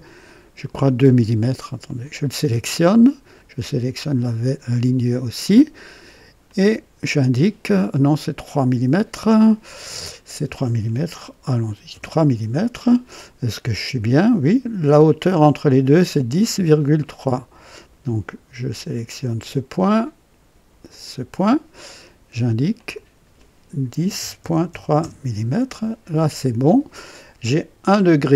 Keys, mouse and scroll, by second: 1.8 click, 4.1 click, 6.4 click, 11.5 KP_3, 11.8 KP_Enter, 18.9 click, 20.8 click, 22.7 click, 23.9 KP_1, 24.1 KP_0, 24.3 KP_Decimal, 24.6 KP_3, 24.9 Return.